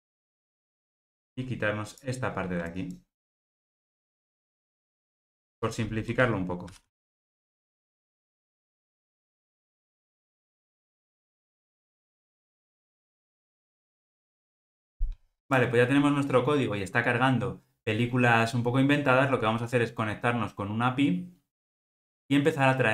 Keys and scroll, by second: 6.7 ctrl+g, 10.1 ctrl+alt+o, 13.0 alt+super+l.